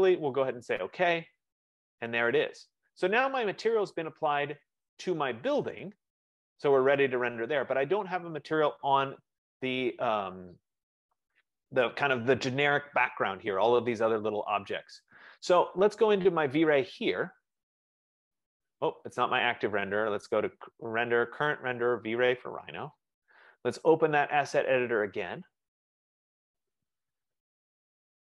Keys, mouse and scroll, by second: 0.6 click, 4.7 click, 17.4 click, 20.1 click, 22.7 click, 24.4 click, 26.6 F15.